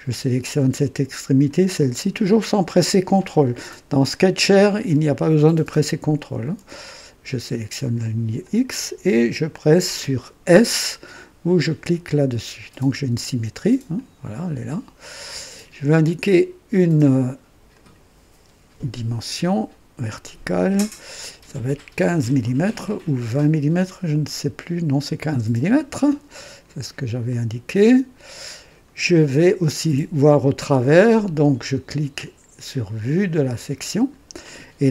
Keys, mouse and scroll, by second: 1.4 click, 8.3 click, 12.1 s, 13.9-15.7 drag, 17.6 click, 20.1 click, 22.0 KP_1, 22.3 KP_5, 22.3 KP_5, 25.2 KP_Enter, 25.2 Return, 27.2-28.5 drag, 33.3 click.